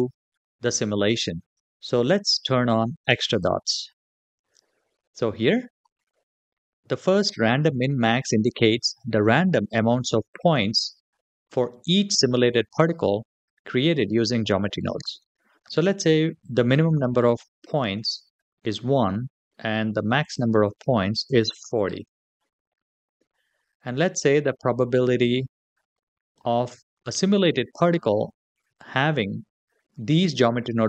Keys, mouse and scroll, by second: 3.1 click, 3.8-4.5 scroll down 2, 4.5-6.2 scroll down 2, 16.2-18.6 drag, 20.0-22.1 drag, 24.4-26.2 drag.